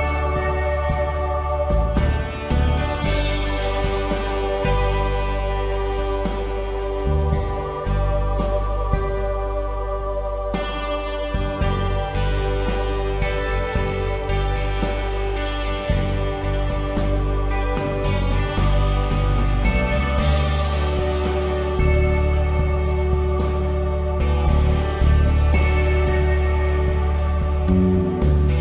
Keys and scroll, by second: 0.8 space, 3.4 space, 4.5 ctrl+z, 5.6 space, 5.9 ctrl+z, 6.6 space, 8.2 ctrl+z, 9.1 space, 9.7 ctrl+z, 10.0 space, 12.0 space, 15.8 space, 17.7 ctrl+Return, 20.4 shift+F6, 23.4 Return, 26.4 alt+Delete, 28.4 alt+Delete.